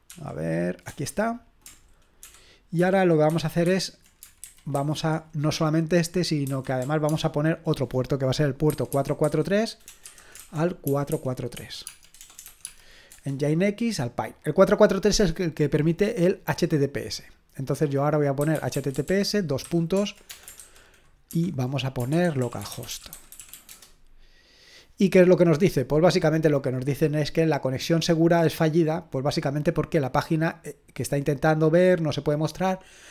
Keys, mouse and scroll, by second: 0.1 ctrl+p, 0.9 Return, 2.2 ctrl+l, 2.8 ctrl+p, 4.5 ctrl+p, 6.6-7.3 typing, 8.7-13.1 typing, 17.0-18.4 drag, 18.2-24.0 typing, 26.3-27.8 drag, 29.7 click.